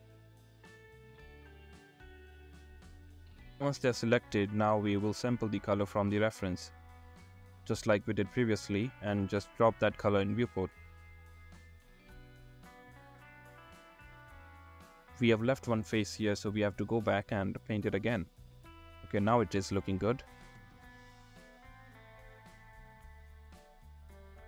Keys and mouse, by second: 0.1-0.5 drag, 0.9 click, 2.5 click, 6.3 click, 6.6 click, 7.4 click, 7.6 middle click, 8.3-10.3 drag, 10.3 middle click, 10.7 click, 10.8 middle click, 11.6-12.0 drag, 14.3 click, 15.1 click, 15.4 ctrl+z, 17.3 middle click, 18.0 middle click, 18.8 shift+middle click, 19.7 shift+middle click, 19.9-21.5 middle drag.